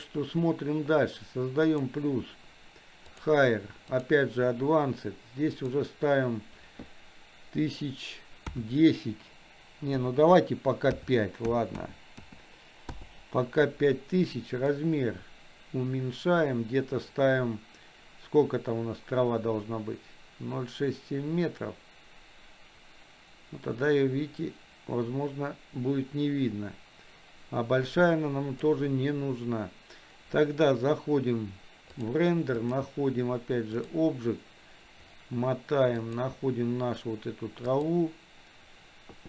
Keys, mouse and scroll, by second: 1.9 click, 3.2-13.1 drag, 11.7 KP_0, 14.7-28.7 drag, 32.0 click, 32.6-34.1 drag, 36.1 click.